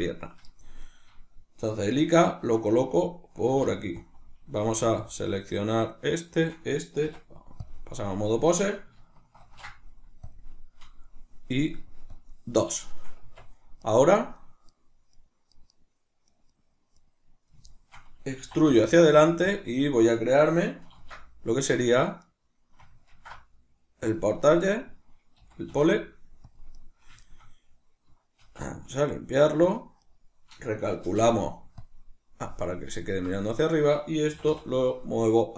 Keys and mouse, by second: 0.8 right click, 2.8 right click, 3.4 g, 4.1 click, 4.6 g, 5.1 click, 5.3 right click, 6.3 shift+right click, 7.0 Tab, 9.4 ctrl+shift+c, 11.9-13.8 drag, 13.2 Tab, 13.8 right click, 14.1 right click, 14.4 right click, 15.1 right click, 15.6 right click, 15.8 right click, 16.3 right click, 16.5 right click, 17.0 right click, 17.7-19.6 shift+middle drag, 18.4 e, 19.6 click, 19.8 right click, 21.0 ctrl+alt+s, 23.2 ctrl+alt+s, 24.2 click, 24.5 right click, 25.4 g, 26.6 click, 26.8 right click, 27.2-30.0 shift+middle drag, 28.4 alt+p, 30.0 right click, 31.0 shift+n, 33.0 ctrl+middle click, 33.6 right click, 34.3 g.